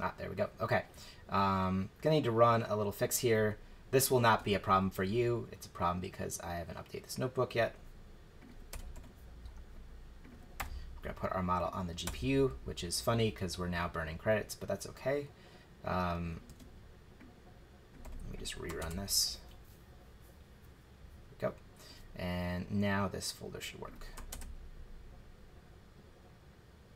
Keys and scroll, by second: 4.3 super+c, 8.7 Return, 8.9 super+v, 10.6 BackSpace, 12.0 Return, 16.5 super+c, 18.0 super+v, 18.8 shift+Return, 24.3 shift+Return.